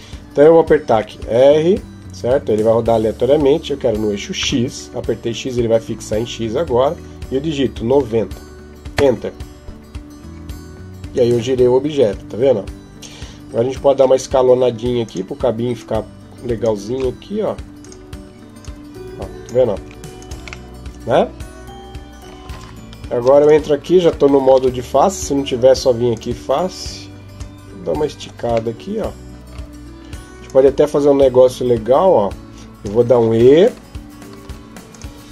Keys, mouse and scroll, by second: 0.7 r, 10.9 click, 13.7 s, 15.6 click, 16.7 s, 18.4 click, 19.5 s, 20.5 middle click, 22.3 Tab, 23.2 right click, 24.3 ctrl+Tab, 27.2 click, 28.6 middle click, 30.2 click, 33.4 e, 35.1 s.